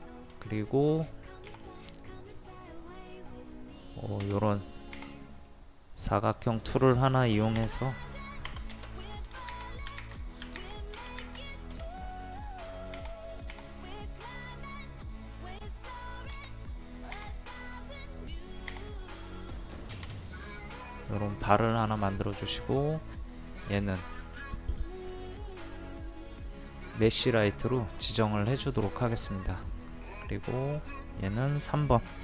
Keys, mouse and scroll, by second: 0.0 shift+middle click, 0.9-1.5 scroll up 1, 1.5-2.3 scroll up 1, 2.3 click, 4.5 click, 5.2 middle click, 6.0 click, 7.6 p, 7.8 click, 8.5 Escape, 9.0 click, 9.5 ctrl+z, 10.0 ctrl+z, 10.6 ctrl+z, 11.2 ctrl+z, 12.0 click, 12.9-15.2 typing, 16.5-17.2 typing, 18.5-19.2 typing, 18.9 click, 20.6 middle click, 22.1 click, 28.9 shift+middle click, 30.6 click.